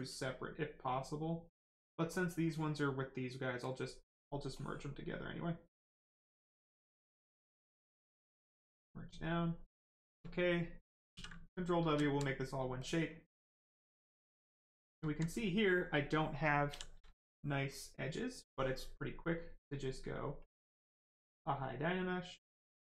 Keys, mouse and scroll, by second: 0.8 click, 3.6 click, 7.2 click, 10.0 right click, 11.1 ctrl+w, 11.4 right click, 11.8 shift+right click, 11.8 right click, 12.0 alt+right click, 12.8 click, 12.8 click, 14.8 right click, 15.0 alt+right click, 16.4 shift+right click, 16.6 shift+f, 20.4 click, 22.8 click.